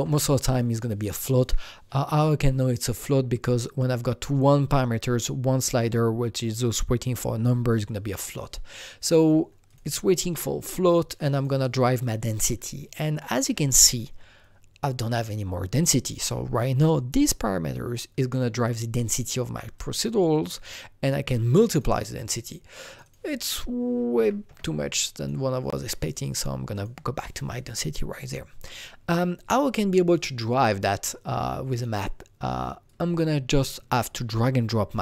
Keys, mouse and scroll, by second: 2.8 ctrl+v, 2.8 click, 8.2 ctrl+v, 8.2 click, 8.2 click, 9.7 click, 10.2 ctrl+v, 11.4 click, 13.9 click, 15.1-19.1 drag, 19.1 click, 19.8 click, 21.7 click, 23.1 double click, 24.2 KP_1, 24.5 Return, 24.5 double click, 25.2 click, 26.7 click, 31.8-35.0 drag.